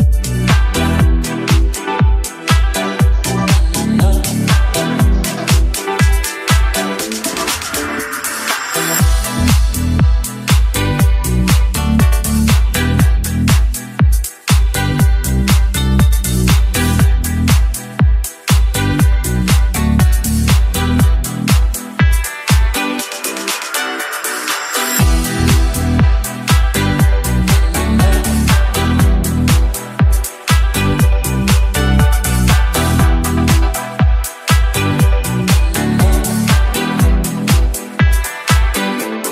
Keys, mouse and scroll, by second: 15.5 middle click, 16.2 shift+d, 16.6 x, 17.5 click, 17.8 d, 19.2 middle click, 19.6 s, 20.9 click, 21.6-23.3 typing, 23.8 click, 24.9 g, 26.3 x, 27.0 click, 28.2 g, 28.6 z, 32.7 click, 33.6 shift+click, 34.5 KP_7, 35.5 g, 35.9 x, 37.9 click, 38.3-39.3 middle drag.